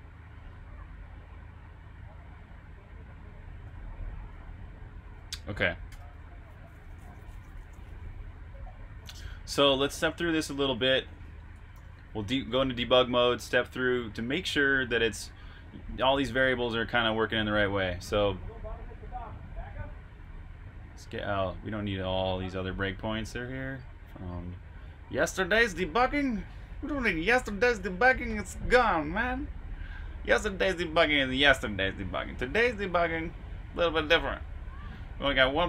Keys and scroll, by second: 3.1-4.7 typing, 5.8-7.0 typing, 9.9-10.3 typing, 11.7 super+\, 11.7-14.2 typing, 16.3 typing.